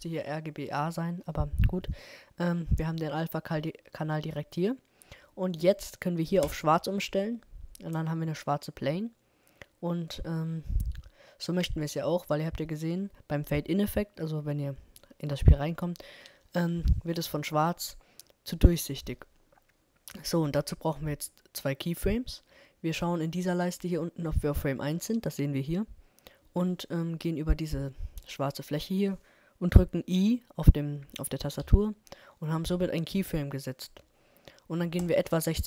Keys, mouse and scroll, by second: 11.8-13.9 middle drag, 31.6 i, 35.0-35.6 drag.